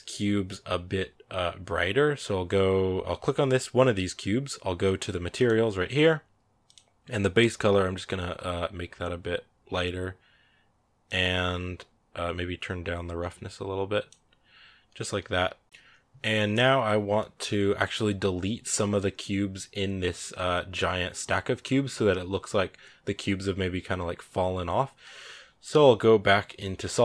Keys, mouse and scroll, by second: 5.2-7.3 drag, 10.9-14.0 drag.